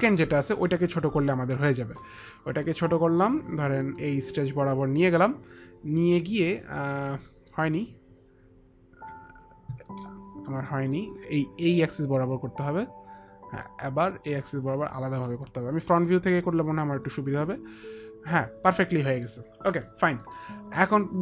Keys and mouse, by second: 1.3 click, 3.1 click, 10.2 ctrl+z, 11.5 click, 14.6 click, 15.9 middle click, 16.0 middle click, 18.7 middle click, 19.3 middle click, 19.9 middle click, 20.4 middle click.